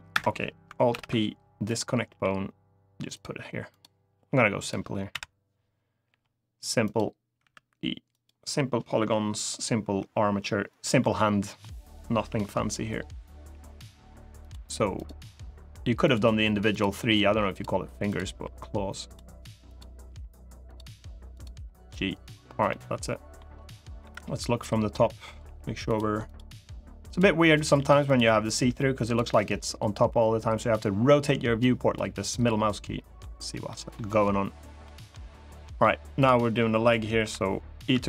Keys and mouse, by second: 0.6 alt+p, 1.8 g, 2.9 click, 3.5 click, 3.9 g, 4.3 click, 4.8 KP_7, 5.8 g, 6.6 click, 7.1 e, 7.8 click, 9.7 e, 10.4 click, 10.7 middle click, 12.0 KP_1, 13.1 g, 14.1 click, 14.7 click, 14.9 g, 15.8 click, 16.7 g, 17.2 click, 17.8 click, 18.0 g, 18.8 click, 19.4 click, 19.8 g, 20.4 click, 21.3 g, 21.9 click, 22.4 middle click, 23.7 KP_7, 25.2 g, 25.6 click, 26.0 click, 26.2 g, 26.8 click, 27.5 g, 27.8 click, 28.4 g, 28.8 click, 29.1-32.9 middle drag, 33.4 middle click, 34.6 middle click, 35.4 middle click, 35.9 click, 36.9 KP_1, 37.6 e.